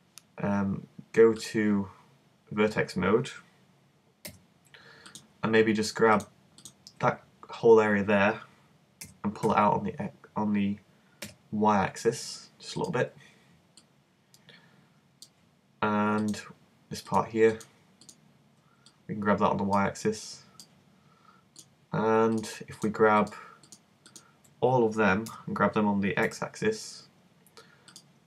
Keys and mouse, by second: 1.4-3.2 middle drag, 4.2 g, 5.1-9.0 drag, 9.0 g, 13.0-14.8 middle drag, 16.2-20.0 middle drag, 20.0 click, 25.3 g.